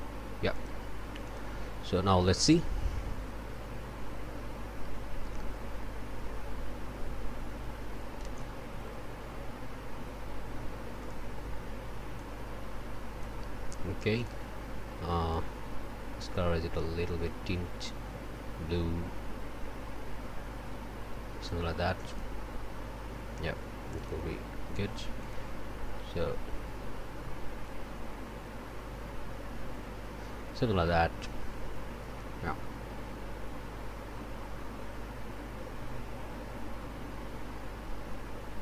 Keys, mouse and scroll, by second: 0.5 click, 1.2 click, 11.0 click, 12.2-13.4 drag, 14.2 click, 15.3-21.7 drag, 22.1 click, 23.9 click, 25.2 click.